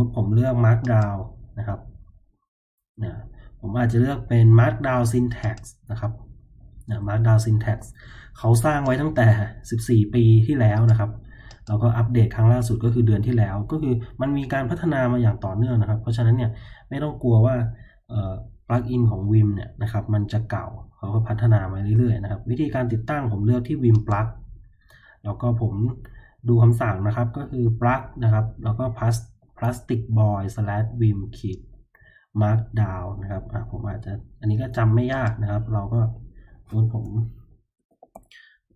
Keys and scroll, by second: 37.5-38.7 typing.